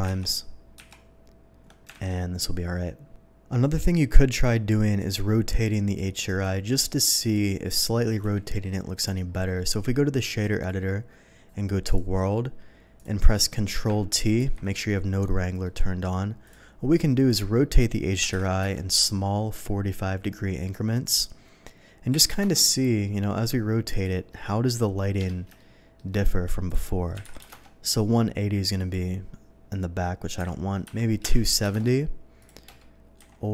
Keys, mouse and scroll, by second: 0.2 ctrl+z, 2.0 alt+a, 2.9 ctrl+s, 5.0 click, 6.3 click, 7.2 click, 8.4 n, 8.9 scroll up 1, 9.3 middle click, 10.4 click, 11.9 click, 13.0 click, 13.3 middle drag, 14.4 ctrl+t, 14.9-15.2 middle drag, 15.6 middle click, 16.4 click, 17.2 click, 18.2 KP_4, 18.4 KP_5, 18.6 Return, 21.0 click, 22.2 KP_9, 22.4 KP_0, 22.6 Return, 23.9 click, 25.2 Escape, 25.6 middle click, 26.7 click, 27.2 KP_1, 27.3 KP_8, 27.4 KP_0, 27.6 Return, 28.8 click, 30.5 KP_2, 30.9 KP_2, 30.9 KP_7, 31.6 KP_0, 31.7 Return, 32.4 click, 33.2 KP_3.